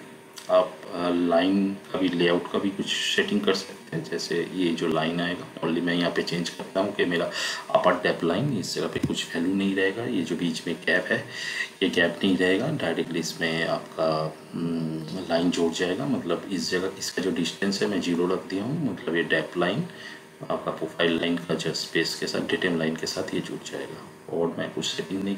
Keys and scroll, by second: 8.8 0.